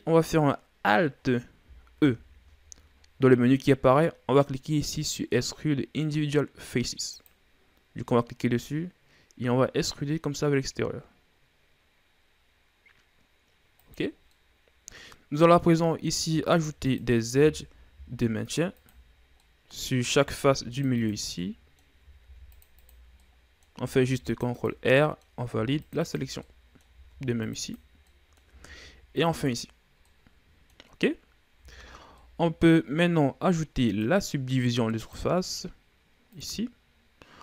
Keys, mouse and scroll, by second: 2.5 alt+e, 14.7 scroll down 1, 14.8-16.6 middle drag, 16.6 ctrl+r, 18.0 ctrl+r, 19.7 scroll down 1, 19.9-20.9 middle drag, 20.9 ctrl+r, 21.9 middle click, 22.7 ctrl+r, 23.7 middle click, 24.5 ctrl+r, 25.4 middle click, 26.0 ctrl+r, 26.9 middle click, 27.6 ctrl+r, 28.5 middle click, 29.2 ctrl+r, 30.6 middle click, 31.5-32.1 scroll up 4, 32.1 Tab, 32.5 scroll down 2, 32.7-34.4 middle drag, 34.4-37.4 drag.